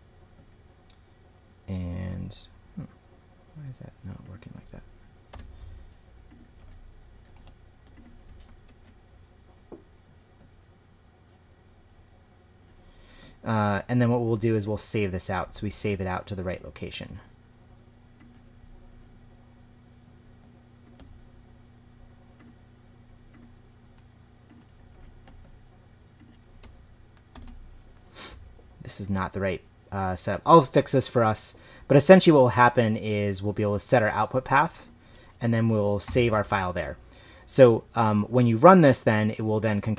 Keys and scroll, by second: 5.0 Right, 5.3 BackSpace, 6.6 super+v, 7.3 super+z, 8.6 shift+', 15.4 super+c, 24.9 super+v, 27.3 shift+4, 35.2 Right, 36.0 /.